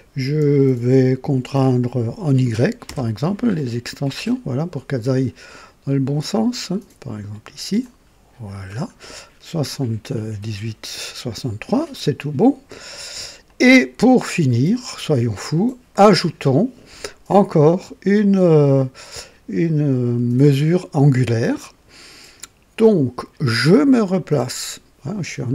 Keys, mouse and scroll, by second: 2.8 y, 3.0 y, 5.1 scroll down 1, 7.8 click, 8.7 scroll up 1, 9.4 scroll down 1, 10.1-10.9 right drag, 13.4-14.7 drag, 24.1 click.